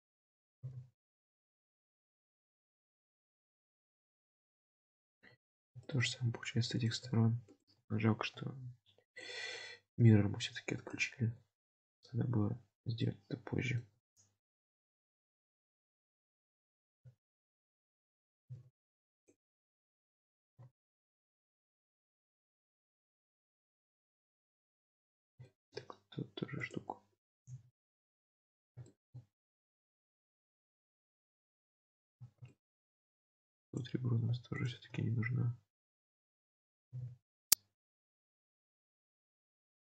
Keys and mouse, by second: 0.6 g, 2.0 alt+z, 2.6 Tab, 3.1-5.2 middle drag, 5.3 Tab, 5.9 shift+middle click, 7.6 shift+click, 8.0 alt+z, 10.2 g, 11.3 alt+z, 12.2 Tab, 13.1-13.9 middle drag, 14.0 Tab, 15.4 click, 16.6 alt+z, 17.8 alt+z, 18.4 g, 20.1 alt+z, 20.7 alt+z, 21.1 middle click, 22.1 Tab, 22.8-24.8 middle drag, 24.8 Tab, 25.4 shift+middle click, 27.5 g, 28.9 shift+middle click, 30.0 Tab, 30.5-32.1 middle drag, 32.1 Tab, 32.6 shift+middle click, 34.6 shift+click, 35.3 alt+z, 36.9 g, 38.2 alt+z, 38.9-39.8 middle drag.